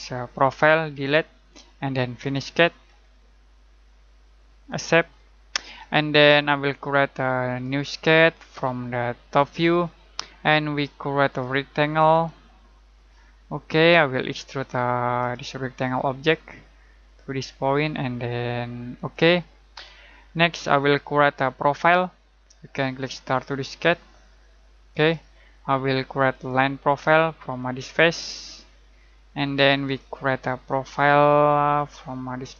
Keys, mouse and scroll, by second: 0.9 Delete, 2.2 click, 4.7 click, 7.4 click, 18.9 click, 20.2 middle click, 23.2 click, 28.8 middle click, 29.9 click.